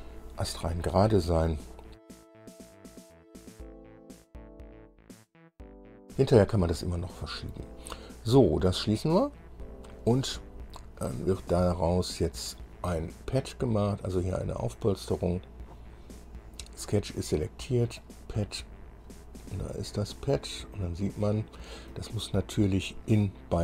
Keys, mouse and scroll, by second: 9.2 click, 10.5-13.0 middle drag, 16.4 scroll down 1, 17.0 click, 18.2 click, 19.5 scroll down 1, 20.0-22.3 middle drag.